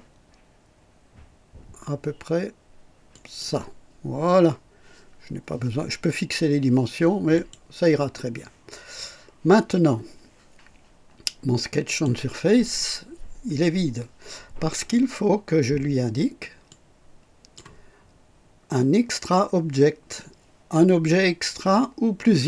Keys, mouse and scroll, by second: 3.1 click, 7.3 click, 11.8 click, 16.6 click.